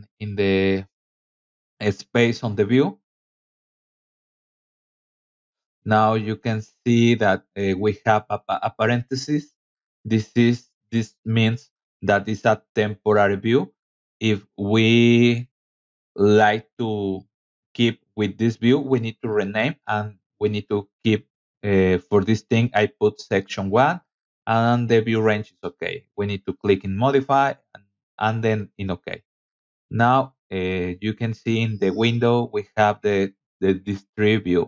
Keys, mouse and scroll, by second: 1.5 click, 4.8-7.0 drag, 7.4 click, 8.9-10.1 drag, 14.1-15.0 typing, 26.1 click, 26.7 click, 27.5 click, 28.2 scroll down 2, 28.7 scroll up 2, 29.4 click, 33.0 click, 33.6 scroll down 2, 33.9 middle click.